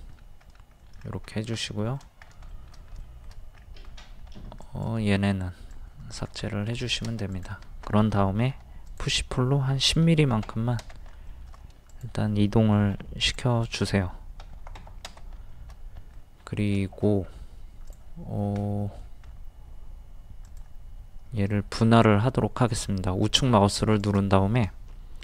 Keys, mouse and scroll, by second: 0.1 scroll up 1, 0.8 middle click, 0.8-1.1 scroll down 1, 1.9-2.2 scroll down 1, 2.2 scroll up 1, 2.3 scroll down 1, 2.5 shift+middle click, 3.5-3.9 scroll up 1, 4.3 scroll up 1, 4.6 click, 6.5 scroll down 1, 6.8 shift+middle click, 7.3 click, 8.5 p, 8.9 click, 10.0 KP_1, 10.2 KP_0, 11.3 shift+middle click, 11.9 click, 12.9 p, 13.2 click, 14.4 KP_1, 14.5 KP_0, 15.5 shift+middle click, 16.5 scroll up 1, 16.8 shift+middle click, 17.2-17.7 scroll up 1, 17.9 click, 18.6 middle click, 19.3 scroll up 1, 20.4 click, 24.0 right click.